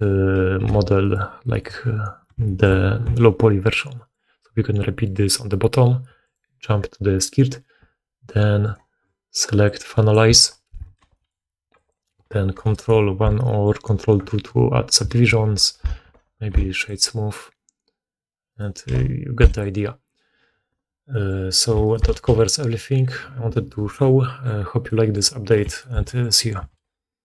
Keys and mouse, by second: 0.6 g, 3.5 middle click, 3.5 right click, 6.3-8.5 middle drag, 8.5 right click, 8.7 middle click, 9.5-11.8 drag, 10.9 g, 11.8-14.3 middle drag, 13.8 ctrl+2, 15.6 ctrl+1, 16.0 w, 18.4 middle click, 18.4 right click, 18.8 w, 21.2 middle click, 21.4 right click, 21.6 shift+middle drag, 21.7 shift+right click, 21.9-27.3 shift+middle drag, 22.2 x.